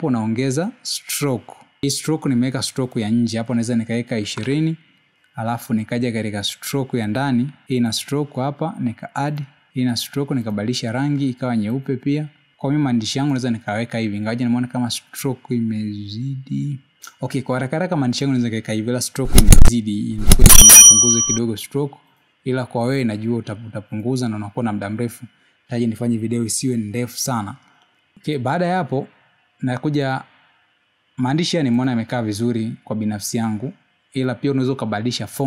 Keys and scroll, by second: 3.8 2.